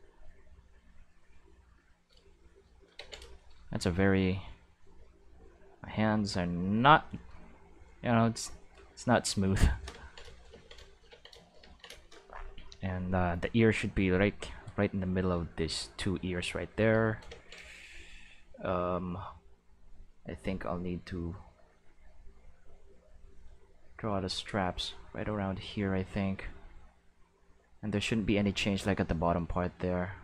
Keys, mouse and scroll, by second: 2.9 ctrl+z, 3.9-6.7 drag, 7.5-9.2 drag, 10.3 shift+middle click, 13.6-15.2 drag, 20.2 click, 22.1 click, 22.8 click, 23.9 click, 24.9 click, 25.8 click, 26.1 click, 26.3 click, 27.6 click, 28.3 click, 29.8 click.